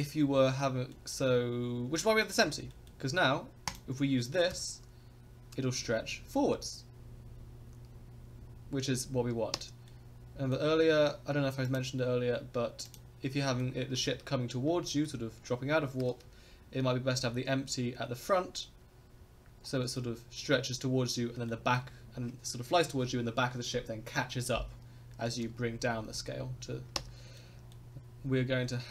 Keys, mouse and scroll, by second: 0.1 scroll up 2, 0.5 middle click, 0.9 middle drag, 1.3 scroll down 2, 2.5 scroll up 2, 2.7 middle drag, 3.7 click, 4.5 s, 9.9-10.5 middle drag, 11.6 click, 12.8 click, 13.4 middle drag, 13.9 shift+middle click, 14.8 middle drag, 15.3 scroll up 1, 19.9 middle drag, 21.5 middle drag, 24.3 middle drag, 25.2 s, 27.3-27.7 middle drag, 28.0-28.9 drag, 28.0 space.